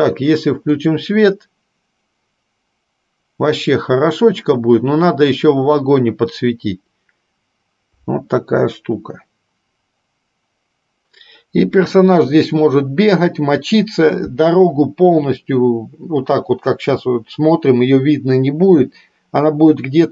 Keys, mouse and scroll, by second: 1.5 click.